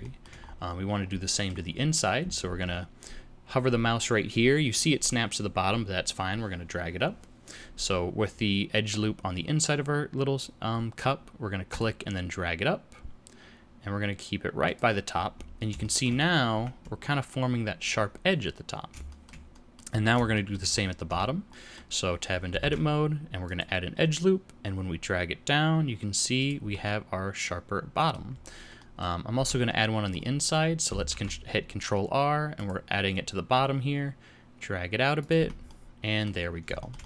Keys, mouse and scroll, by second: 0.0 shift+middle click, 0.3-1.2 scroll up 2, 1.2 middle click, 2.4 ctrl+r, 15.1-15.6 scroll up 1, 15.6 scroll up 1, 15.7 shift+middle click, 16.2-16.5 scroll up 2, 16.5 Tab, 18.4-18.8 scroll down 2, 19.0 shift+middle click, 19.5 middle click, 19.9-20.3 scroll down 2, 20.3 shift+middle click, 20.7 scroll up 1, 21.0 Tab, 21.4 middle click, 22.5 ctrl+r, 26.6 Tab, 26.8 middle click, 28.3-29.1 scroll up 2, 28.7 middle click, 29.1 scroll down 1, 29.3 Tab, 29.6 middle click, 31.0 ctrl+r, 35.3 Tab, 35.6 middle click, 36.4-36.7 scroll down 4, 36.7 shift+middle click, 36.9 middle click.